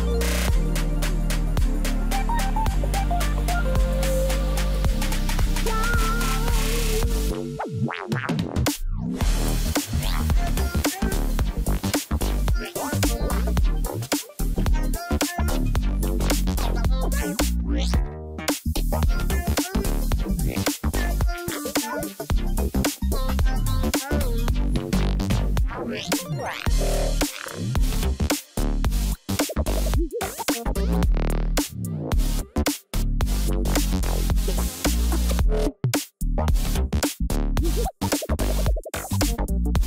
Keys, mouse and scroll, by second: 0.5 ctrl+a, 3.6 double click, 4.0 double click, 6.6 double click, 13.2 ctrl+click, 17.6 double click, 26.9 ctrl+j, 28.1 ctrl+click, 31.4 double click, 36.2 5, 37.8-38.6 typing, 39.5 ctrl+a.